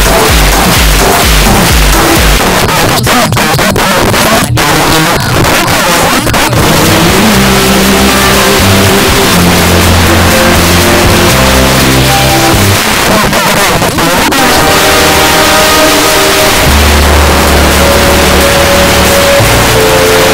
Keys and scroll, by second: 2.4 Page_Down, 12.8 Page_Down.